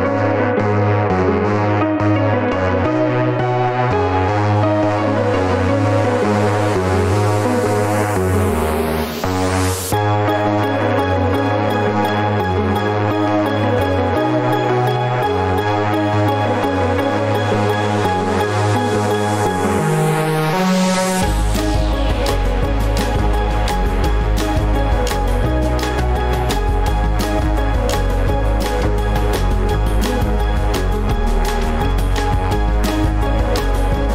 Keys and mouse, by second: 5.3 click, 20.8 click, 33.2 click.